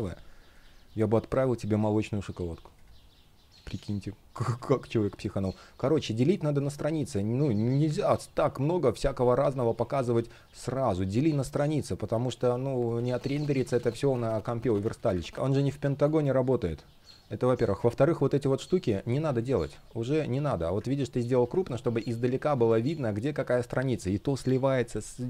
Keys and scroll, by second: 4.0 space, 12.4 super+z, 15.0 super+z, 15.3 space, 21.7 space.